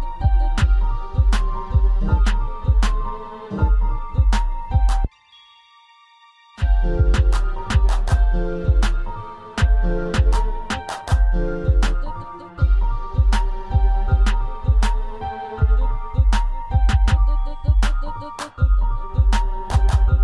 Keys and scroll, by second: 3.0 ctrl+z.